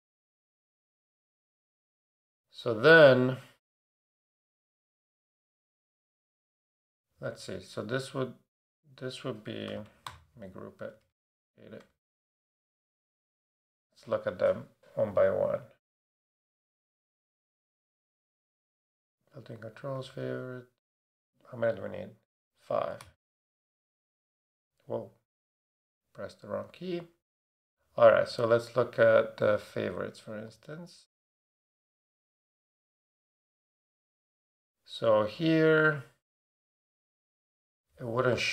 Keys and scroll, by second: 0.5 Up, 4.1 super+-, 9.7 super+a, 10.1 super+g, 11.0 super+d, 11.8 shift+super+d, 11.9 shift+super+Left, 17.9 shift+super+d, 23.0 super+d, 23.5 e.